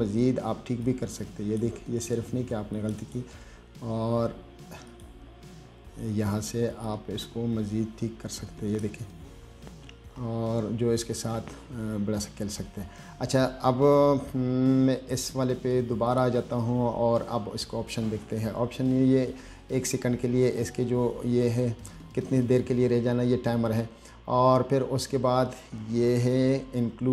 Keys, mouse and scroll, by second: 1.1-1.8 drag, 3.0 click, 3.3 click, 5.2 click, 7.1-9.1 drag, 9.8-10.1 scroll up 2, 10.5-10.8 scroll down 1, 11.0-11.3 scroll up 2, 12.3-12.6 scroll down 1, 16.4 click.